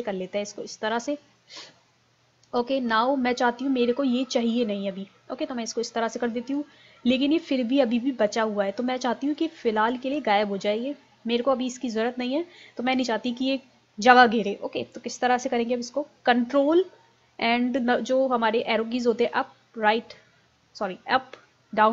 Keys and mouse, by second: 5.3-7.2 drag, 8.7 click.